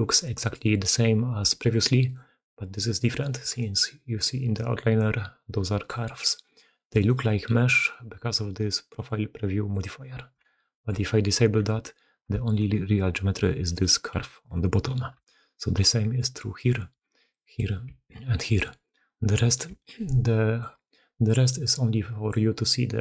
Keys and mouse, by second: 0.1 middle click, 0.4-1.4 middle drag, 1.5-1.9 alt+middle drag, 2.0-2.4 alt+middle drag, 3.4 alt+click, 5.7-6.1 alt+drag, 6.8 alt+click, 9.6 click, 10.3-10.8 shift+drag, 11.3 Tab, 12.3 alt+a, 13.6 click, 14.0 g, 15.2 Tab, 15.7-22.5 typing, 16.0 click, 17.2 click, 18.2 click, 19.8-20.5 drag, 21.1-22.2 drag, 22.5-23.0 drag.